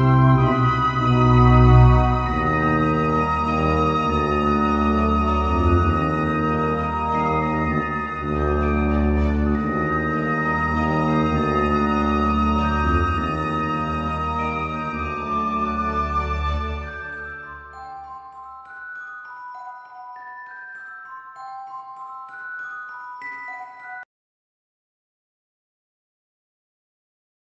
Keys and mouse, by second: 0.0-11.3 typing, 8.8 click, 10.8 ctrl+z, 13.4 g, 13.9 g, 15.3-17.6 typing, 18.6 middle click, 19.1 g, 19.6 h, 19.8 h, 21.4 g, 22.2 g, 23.7 shift+h, 24.8 ctrl+z, 25.1-27.5 typing.